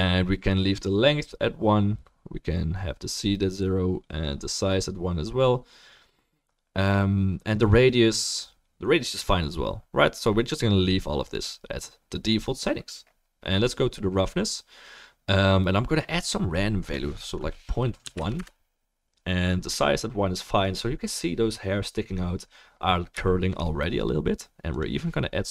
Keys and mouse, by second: 17.0-18.5 drag, 17.0-18.5 middle drag.